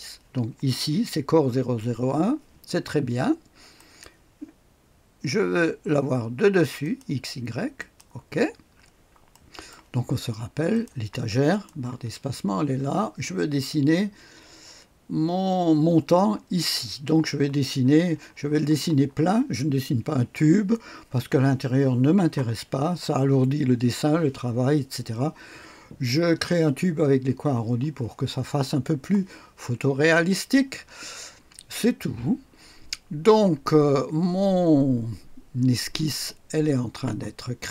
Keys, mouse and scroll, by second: 3.7 click, 6.8 click, 7.8 click, 8.9-9.3 scroll up 2, 9.3 right click, 10.7-12.4 drag, 11.9 space, 12.7 space.